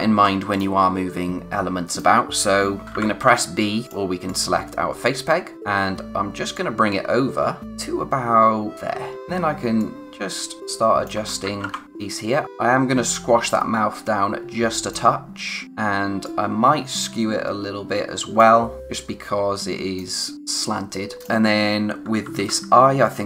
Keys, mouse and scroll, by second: 0.5 click, 2.8 typing, 3.8 click, 5.5 scroll down 1, 6.5 click, 9.1 typing, 9.7 click, 11.4 ctrl+z, 11.8 click, 12.4 z, 13.5 click, 21.8-22.4 typing, 22.9-23.2 scroll down 1.